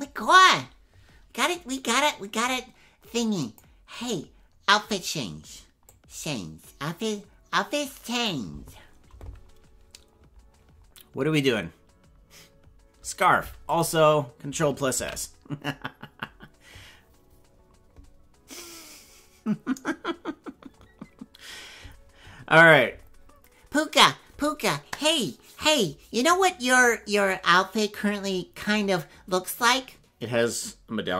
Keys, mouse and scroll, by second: 1.4 click, 3.5 click, 6.0-8.3 drag, 15.1 ctrl+s.